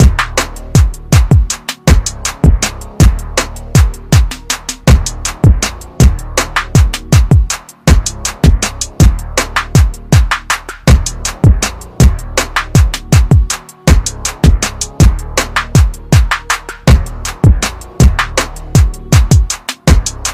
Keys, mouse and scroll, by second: 2.1 typing, 2.6 click, 3.7-5.8 scroll down 1, 7.7-9.4 scroll down 1, 9.4 click, 9.7-10.2 scroll down 1, 10.9 click, 13.1-14.2 typing, 17.6 ctrl+Num_Lock, 17.9 ctrl+KP_Add, 18.8 scroll down 1.